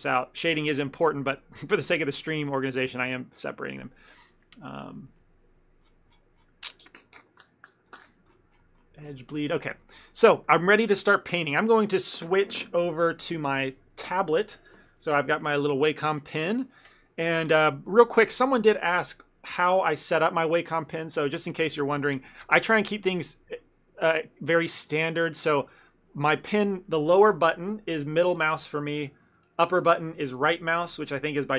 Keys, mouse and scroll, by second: 1.5 click, 10.2 middle click, 10.4 ctrl+middle click.